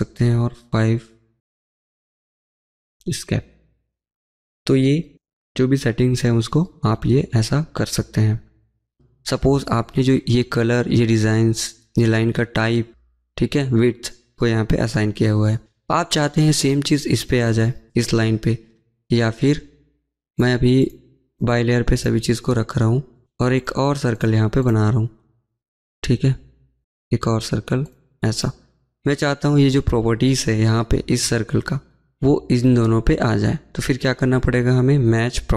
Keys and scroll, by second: 0.9 5, 1.1-6.8 Return, 5.3 Escape.